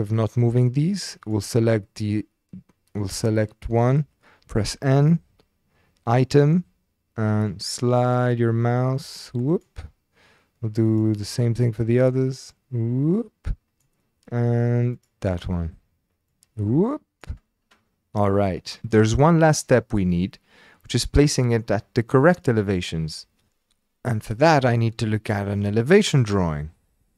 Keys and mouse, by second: 3.0 click, 4.7 n, 6.2 click, 7.4 click, 12.5 click, 15.0 click, 16.3 click, 18.8 n.